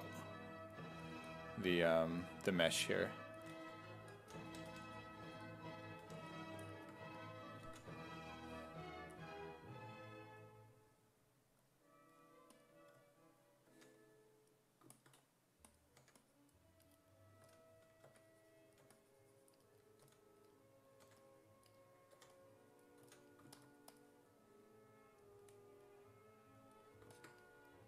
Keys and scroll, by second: 3.5-6.0 typing, 7.7 ctrl+z, 13.7 1, 16.0 1, 17.4 s, 18.1 1, 18.8 2, 20.0 s, 21.0 1, 22.2 3, 23.0 s.